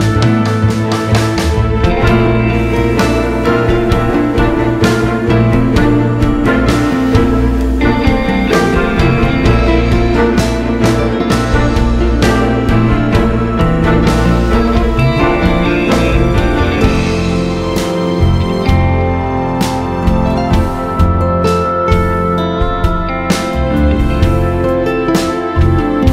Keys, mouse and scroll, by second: 2.8 click, 4.1 click, 4.5 g, 6.5 click, 6.6 scroll down 1, 6.8 a, 7.2-7.8 scroll down 2, 8.1-9.6 scroll up 2, 9.6 scroll up 1, 11.0-11.4 scroll down 2, 12.0-12.4 scroll up 2, 13.8-15.5 drag, 16.6 scroll up 1, 17.2 scroll down 1, 17.4 scroll up 1, 23.2 scroll down 2, 23.4 scroll up 1.